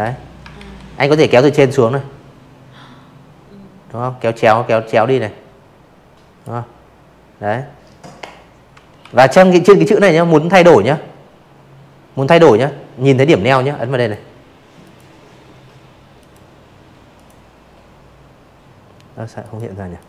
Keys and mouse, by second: 5.9 v, 10.9 click, 11.8 click, 13.1 click, 14.1 click, 16.4 right click, 16.9 click, 17.8 ctrl+z, 18.1-19.7 drag.